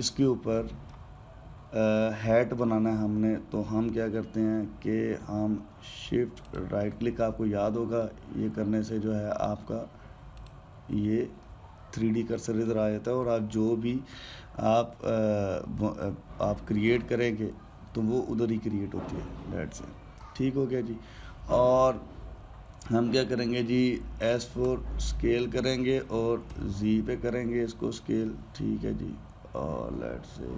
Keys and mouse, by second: 7.2-7.7 shift+right drag, 8.8-11.2 middle drag, 11.2-12.1 shift+right drag, 12.1-14.1 middle drag, 14.1 shift+a, 25.4 s.